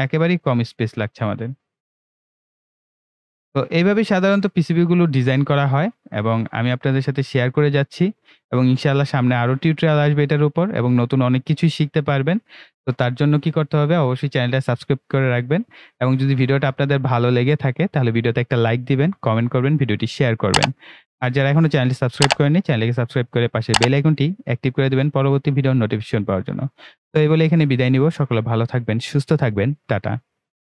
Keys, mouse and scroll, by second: 2.2-2.7 shift+scroll down 2, 2.7 right click, 2.9-30.7 shift+right drag.